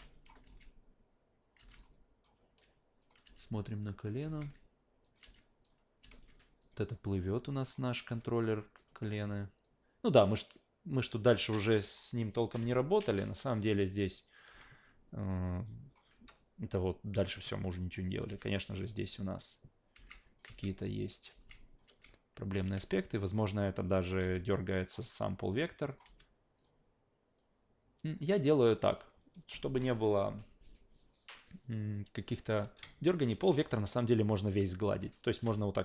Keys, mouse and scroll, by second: 0.0 drag, 0.4 alt+v, 1.6 alt+v, 1.8-2.2 alt+drag, 3.0 click, 3.3 alt+v, 4.2 alt+v, 5.0 click, 5.2 alt+v, 6.0 alt+v, 6.6 drag, 7.7 click, 8.1 a, 8.9 alt+middle click, 9.6-11.9 drag, 12.6 w, 13.2-14.4 drag, 14.5 s, 15.5-15.9 drag, 16.1 s, 18.0 drag, 18.3 alt+v, 19.9 alt+v, 20.2 click, 21.3 alt+v, 21.6 drag, 21.9 alt+v, 22.5 alt+v, 23.2 click, 23.9 click, 24.2 f, 24.8 click, 25.6 click, 26.0 f, 26.6 click, 27.4-28.7 drag, 33.2 shift+click, 35.6 click.